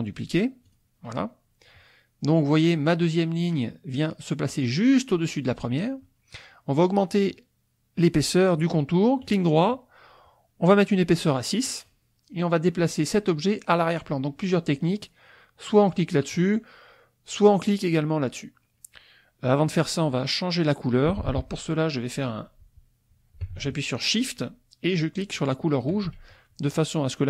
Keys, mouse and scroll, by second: 0.8 click, 9.2 click, 11.1 click, 25.3 shift+click.